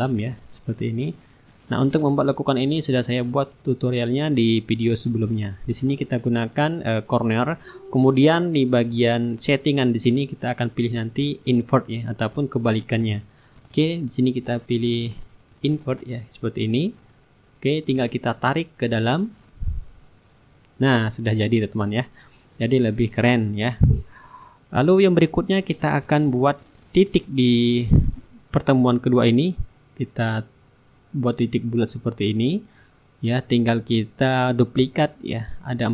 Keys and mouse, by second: 1.4 click, 3.0 click, 5.4-7.6 drag, 8.2-13.0 drag, 13.0 shift+click, 14.5-15.6 middle drag, 17.0 click, 18.7-21.4 drag, 22.4-25.3 drag, 23.4 shift+right click, 24.0-25.3 right drag, 26.7-28.2 middle drag, 28.6-31.0 drag, 29.3 middle click, 31.6-34.0 ctrl+drag, 34.0 click, 35.5 click.